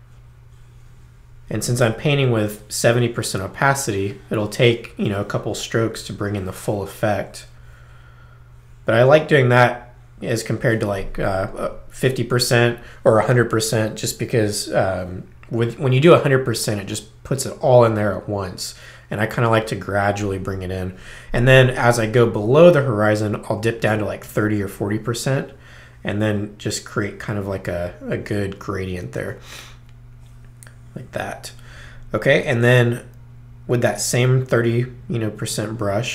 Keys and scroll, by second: 24.2 3.